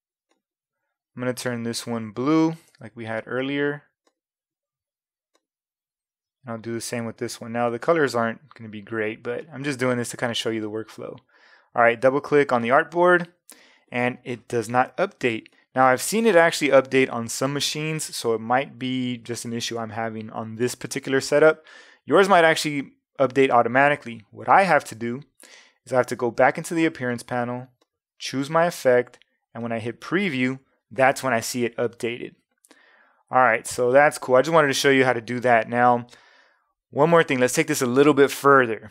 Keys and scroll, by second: 2.7 ,, 14.7 v.